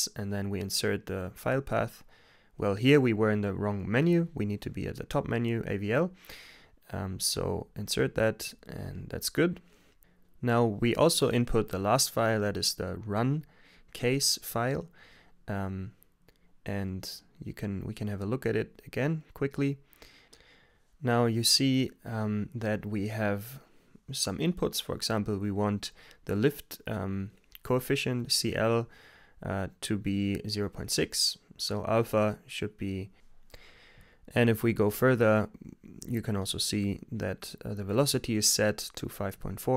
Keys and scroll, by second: 0.5 Return, 3.0 Return, 3.6-4.8 typing, 5.0 super+v, 6.0 Return, 10.0 Return.